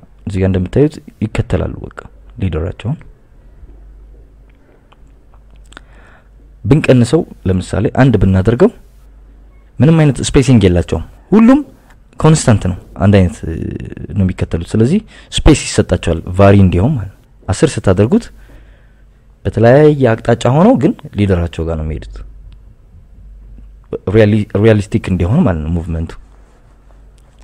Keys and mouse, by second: 5.5 click, 6.3-7.5 drag, 8.2 click, 13.2 click, 14.0 click, 15.5 drag, 15.9 click, 26.3 click, 27.1 click.